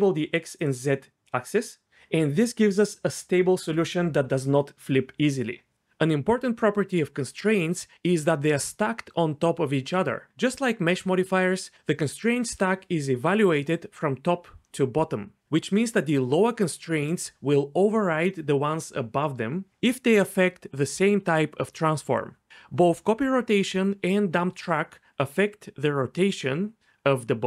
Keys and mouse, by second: 0.5 click.